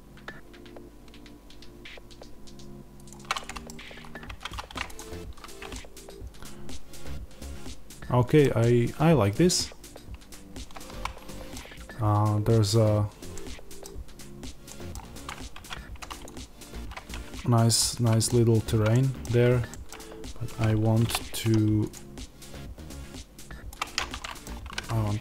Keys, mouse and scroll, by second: 3.6 scroll, 4.2 Tab, 4.9 click, 5.0 z, 5.7-15.0 middle drag, 8.3 scroll down 2, 15.0 click, 15.4 Tab, 16.1 click, 17.7-23.6 middle drag, 20.9 o, 23.6 click, 24.3-25.2 middle drag, 24.5 g.